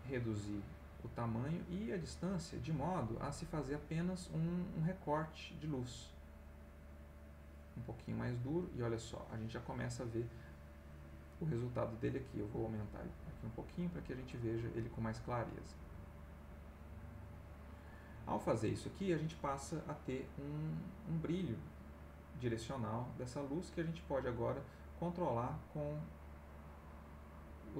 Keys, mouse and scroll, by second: 1.0-1.5 scroll up 1, 1.5 click, 2.5-4.3 scroll up 1, 5.2 click, 6.2 click, 9.2 middle click, 10.0 middle click, 11.2-12.9 drag, 15.3 click, 16.3 click, 23.6 click, 26.8 click.